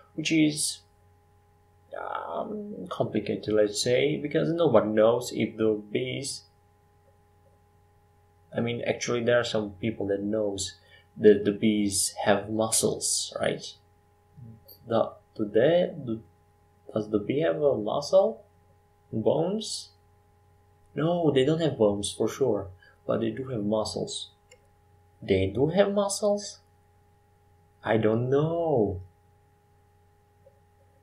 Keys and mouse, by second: 6.2 e, 9.5 s, 10.7 e, 12.2 e, 13.0 s, 14.8 e, 18.3 e, 18.6 s, 20.5 e, 25.8 click, 27.5 Tab, 29.1 click.